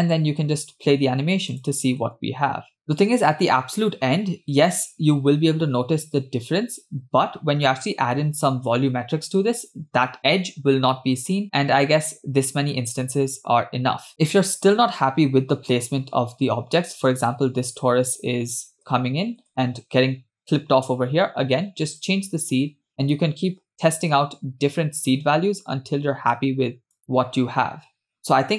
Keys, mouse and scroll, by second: 0.0 space, 0.6 space, 1.5 click, 2.1 space, 7.2 space, 13.1 space, 17.1-19.8 typing, 22.0 click, 23.0 click, 24.2 space, 26.6 space.